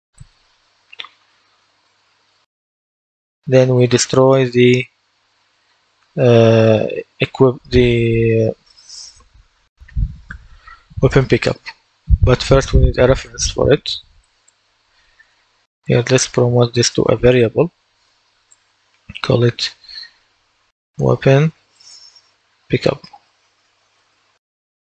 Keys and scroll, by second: 21.1-24.9 typing.